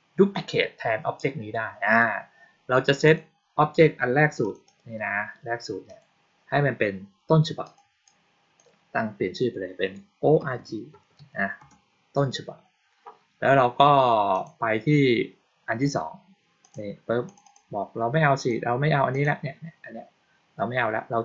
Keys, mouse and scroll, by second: 2.9 click, 4.3 click, 4.5 click, 5.7 click, 7.5 click, 7.9 click, 14.2 click, 16.5 click, 17.1 click, 17.3 click, 18.2 click, 19.0 click.